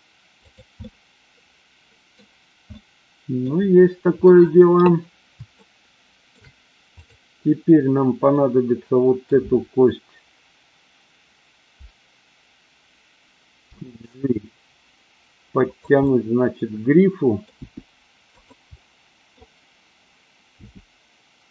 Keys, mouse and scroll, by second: 0.3 click, 0.9-2.1 middle drag, 2.7-3.5 middle drag, 5.6-6.2 shift+middle drag, 7.0 click, 8.3-9.2 middle drag, 13.6 g, 15.6 click, 16.1-17.5 middle drag, 17.6 g, 18.2 click, 18.7 scroll up 1, 18.8-19.3 middle drag, 20.6 g.